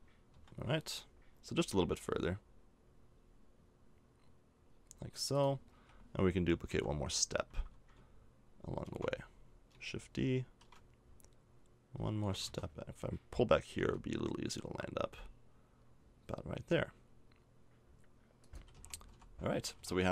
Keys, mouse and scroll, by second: 1.5 g, 5.7 a, 6.7 l, 8.8 shift+g, 10.6 shift+d, 13.7 g, 18.6 a, 18.7 Tab, 19.1 z, 19.3 middle click, 19.7 a.